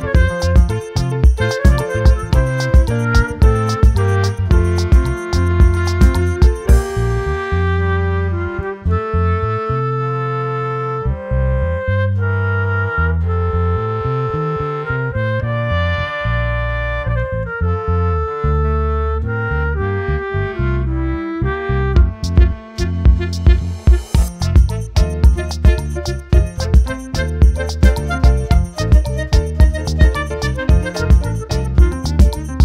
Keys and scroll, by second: 6.9 ctrl+t, 28.5 ctrl+t.